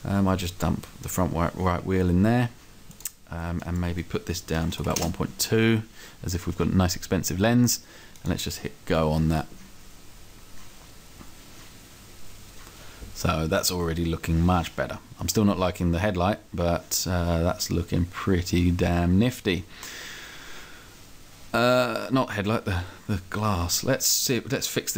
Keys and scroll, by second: 4.6 1, 4.9 2.